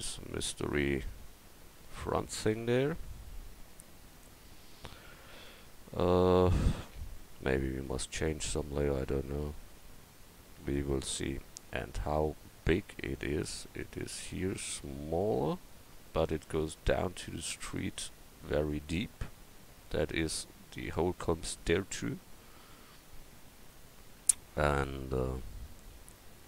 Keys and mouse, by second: 3.6 KP_1, 25.0 KP_1.